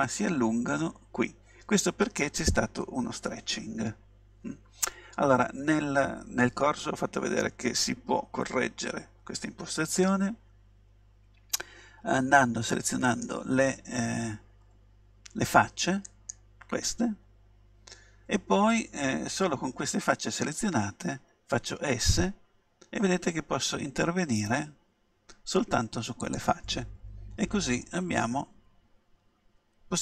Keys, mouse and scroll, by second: 13.1-15.2 right drag, 16.1-18.0 right drag, 21.8 s, 26.4-28.4 drag, 27.9-29.8 middle drag.